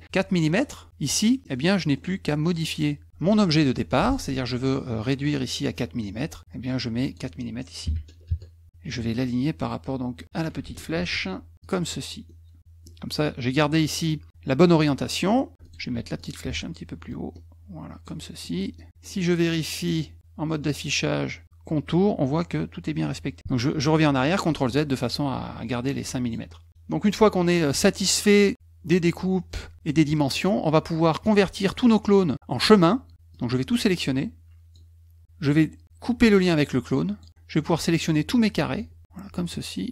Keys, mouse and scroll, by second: 1.4 middle click, 1.4-2.0 scroll up 2, 1.9 middle click, 3.0 F2, 3.3 click, 6.2 click, 7.0 click, 10.2 shift+click, 11.0 ctrl+shift+a, 11.6 click, 12.3 middle click, 14.8 middle click, 15.6 click, 15.9 F2, 16.2 click, 16.4 F1, 17.1 ctrl+click, 18.4 middle click, 19.9 click, 24.5 ctrl+z, 24.9 ctrl+z, 25.3 ctrl+z, 26.2 click, 27.5 middle click, 32.1 middle click, 33.3-34.7 drag, 37.1 click, 37.3-38.8 drag, 39.6-39.9 shift+drag.